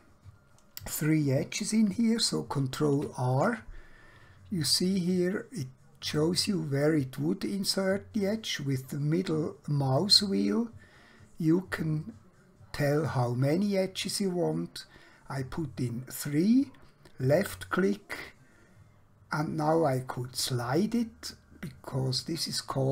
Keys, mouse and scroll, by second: 1.2 ctrl+Num_Lock, 2.8 ctrl+r, 10.3-13.6 scroll up 1, 17.2 click.